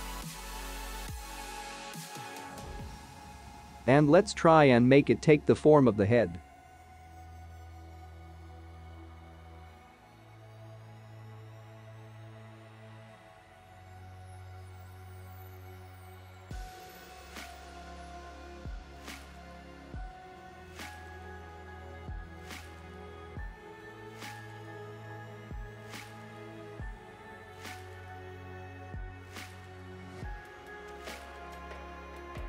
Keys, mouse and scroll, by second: 0.2 ctrl+click, 0.4-1.1 scroll up 4, 1.3 s, 2.5 click, 2.9-3.6 scroll up 7, 4.8 click, 5.4-6.1 scroll down 2, 6.1 g, 7.4 click, 7.9 s, 8.0 middle click, 8.9 click, 9.4 s, 10.2 click, 10.5 s, 10.9 click, 11.2 s, 11.3 middle click, 12.2 click, 13.1 g, 15.8 click, 18.1 s, 19.9 click, 21.3 s, 21.4 middle click, 22.2 click, 22.6 s, 22.7 middle click, 23.2 click, 24.2 middle click, 27.8 middle click.